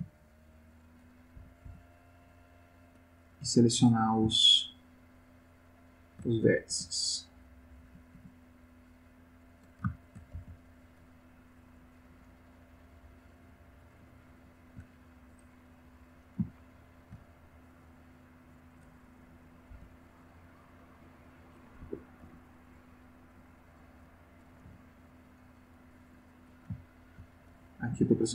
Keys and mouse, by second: 0.6-1.1 drag, 1.4 b, 2.4 click, 4.7 shift+click, 5.1 shift+click, 5.6 shift+click, 6.7 b, 6.9 click, 7.8 b, 8.5 click, 10.0 shift+click, 10.3 shift+x, 10.8 shift+click, 11.8 click, 12.1 g, 13.1 click, 14.2-14.9 shift+middle drag, 16.0 click, 16.4-17.2 shift+middle drag, 17.8 click, 19.6 c, 20.2-21.8 drag, 21.8 Escape, 22.2 x, 22.6 click, 23.6 click, 24.6 g, 25.2 click, 26.4 click, 26.8 ctrl+middle click, 27.9 g.